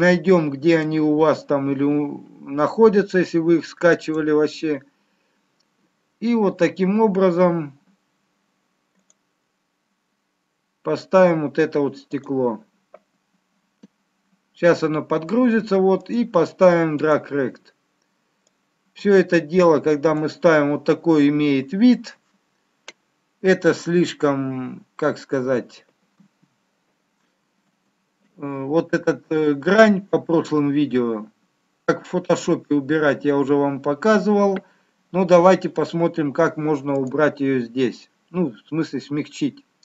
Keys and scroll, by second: 27.3 ctrl+z.